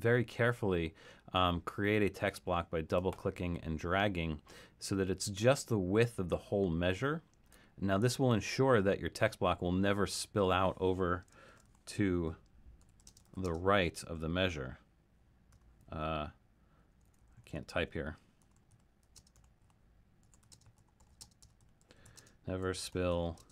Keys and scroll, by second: 11.3-13.9 typing, 15.5 r, 15.9 BackSpace, 16.9-23.5 typing.